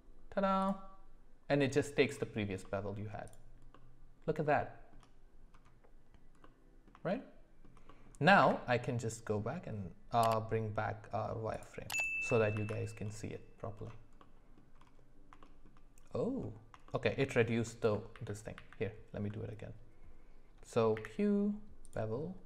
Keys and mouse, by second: 2.6 middle click, 3.2 click, 3.7-4.3 middle drag, 4.6-4.9 shift+middle drag, 6.4 middle click, 7.0 shift+middle click, 7.8 middle click, 8.4 q, 11.9 click, 12.5 ctrl+s, 14.2 middle click, 15.4 shift+middle drag, 16.8 shift+middle click, 18.1 ctrl+z, 18.5 ctrl+z, 20.9 q.